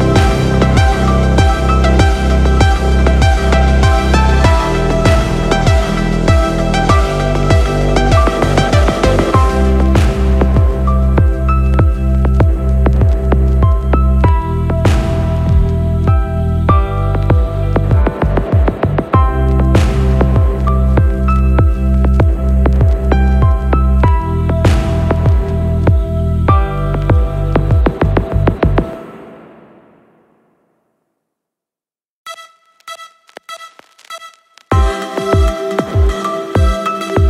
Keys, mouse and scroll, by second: 0.1 click, 3.6 shift+a, 13.1 click, 13.9-16.9 drag, 17.2 click, 17.4-20.9 drag, 24.6 n, 26.4 click, 27.2 n, 27.8-29.1 scroll down 5, 29.1-29.8 scroll down 6, 30.2 shift+middle drag, 31.3 middle click, 32.8 shift+middle click, 34.6 middle click, 35.9-36.3 scroll up 3, 36.6 shift+middle click.